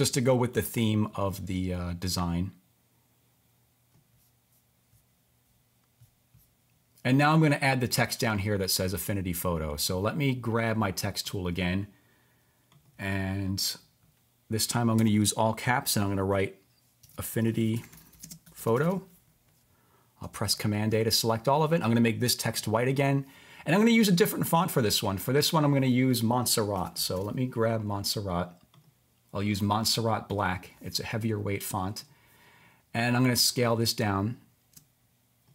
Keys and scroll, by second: 16.7-19.3 typing, 20.4 super+a, 26.5-27.7 typing.